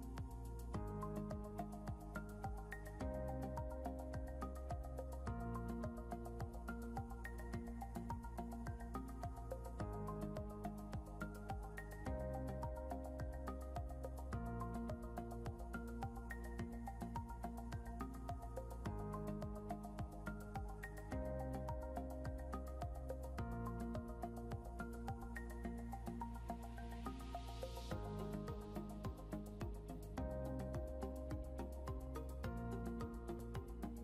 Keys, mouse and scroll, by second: 3.2 scroll down 1, 5.2 ctrl+g, 9.5 click, 10.6 scroll up 1, 11.5 scroll up 1, 13.1 click, 14.4 scroll up 1, 15.1 click.